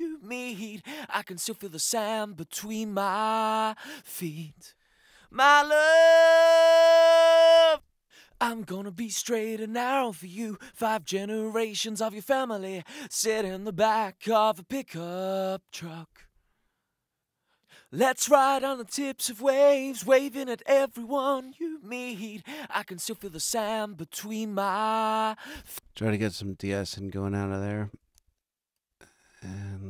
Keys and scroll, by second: 7.5 space, 25.5 space.